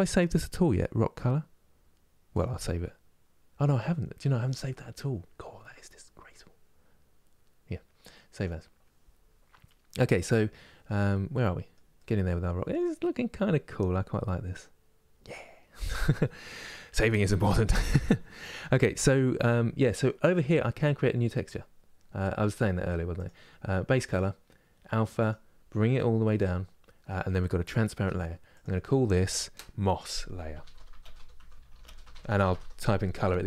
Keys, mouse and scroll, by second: 10.7-25.7 middle drag, 25.7-33.4 drag.